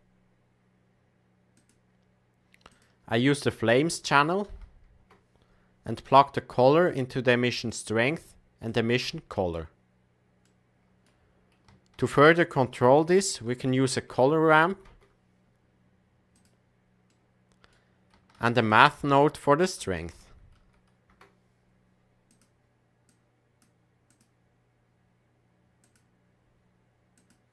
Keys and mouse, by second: 2.6-5.6 drag, 6.8-7.6 drag, 8.7-10.1 drag, 10.4 middle click, 11.9 shift+a, 17.2 middle click, 18.3 shift+a, 23.0 click, 24.1-26.0 drag, 27.1-27.5 drag.